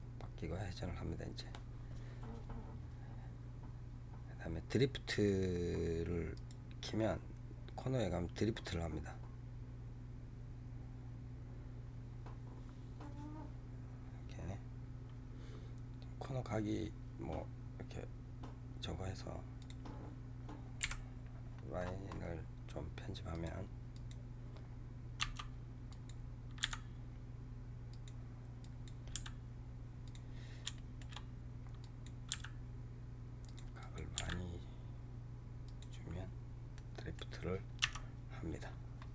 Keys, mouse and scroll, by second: 6.3-9.1 drag, 19.5 click, 19.9 scroll down 4, 20.7 KP_7, 21.4-22.6 scroll down 17, 23.3 click, 23.8 click, 24.4 scroll down 3, 25.1 Tab, 25.8 click, 26.5 g, 27.9 click, 28.5 click, 29.0 g, 30.3 scroll down 2, 30.7 shift+middle click, 31.2 scroll up 1, 31.7 click, 32.2 g, 33.7 click, 34.1 g, 36.6-37.9 middle drag, 37.9 Tab, 38.5-38.9 scroll up 7.